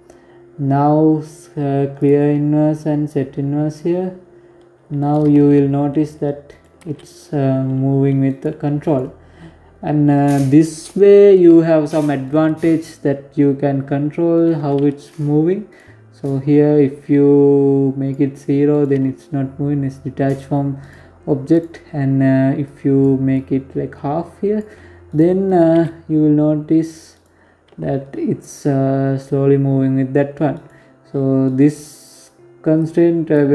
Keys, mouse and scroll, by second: 0.7 click, 1.8 click, 3.7 right click, 4.1 g, 5.5 g, 7.6 right click, 9.5 right click, 11.0 right click, 13.1 right click, 14.4 right click, 15.5 click, 17.4 right click, 17.7 g, 20.2 right click, 21.4 click, 22.1 click, 23.8 right click, 24.2 right click, 24.4 g, 26.1 scroll down 5, 26.4 g, 29.8-30.2 scroll up 5, 30.2 right click, 31.5 click.